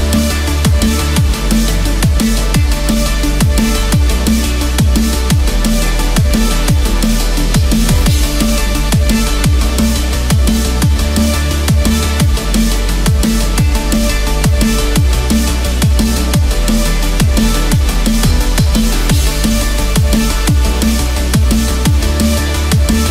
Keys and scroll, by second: 1.3 ctrl+=, 9.3 ctrl+z, 11.2 ctrl+-, 11.3 ctrl+space, 14.8 ctrl+z.